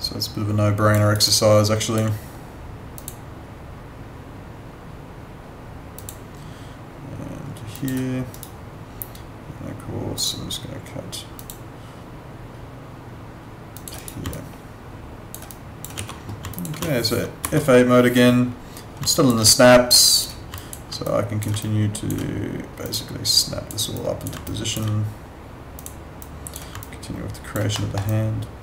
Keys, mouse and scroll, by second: 1.0 alt+right click, 1.3 alt+click, 3.0 click, 6.0 click, 8.3 right click, 10.1 click, 14.0 right click, 14.3 alt+click, 15.9 w, 16.5 alt+click, 17.4 F9, 19.1 alt+click, 21.0 click, 21.6 alt+click, 24.4 alt+click, 26.8 alt+click, 27.7 alt+middle click, 28.0 alt+click.